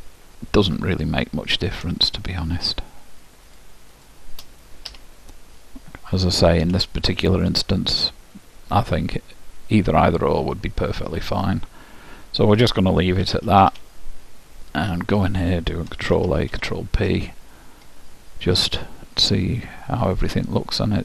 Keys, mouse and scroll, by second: 2.2-6.1 drag, 5.0 f, 5.7-8.3 middle drag, 13.4 a, 13.8 a, 14.0 middle click, 16.4 ctrl+a, 16.7 ctrl+p, 18.1-19.9 middle drag, 20.4-21.0 drag.